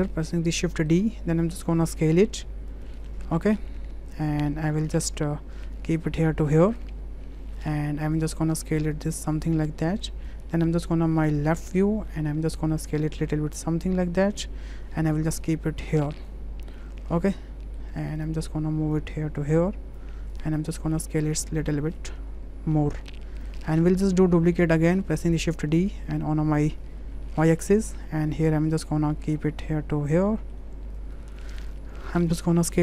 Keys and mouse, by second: 0.3 shift+d, 1.9 s, 5.0 w, 5.7 click, 8.1 click, 9.0-10.3 drag, 12.1 shift+middle drag, 13.0-14.5 drag, 14.9 w, 15.5-16.3 drag, 16.8-17.8 middle drag, 18.2-20.0 drag, 21.3-23.5 drag, 24.8 shift+d, 28.8 w, 29.3 click, 30.3 middle drag, 31.1 click, 32.7 click.